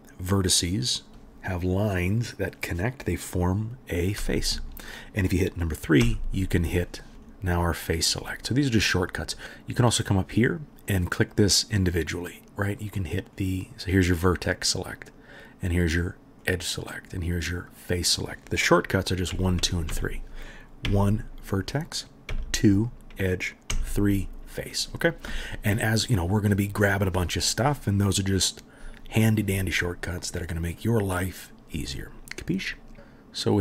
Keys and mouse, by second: 4.2 3, 4.5 middle click, 6.0 3, 6.8 middle click, 6.9 right click, 7.2-10.0 right drag, 7.5 click, 7.5 middle click, 7.7 click, 7.7 middle click, 8.5 click, 8.5 middle click, 8.8 click, 8.8 middle click, 9.1 click, 9.1 middle click, 9.4 click, 9.4 middle click, 9.4 KP_1, 18.7-19.9 middle drag, 19.3 1, 19.6 2, 19.9 3, 20.9 1, 21.6-22.9 right drag, 22.3 2, 22.9 middle click, 23.0-33.6 right drag, 23.7 3.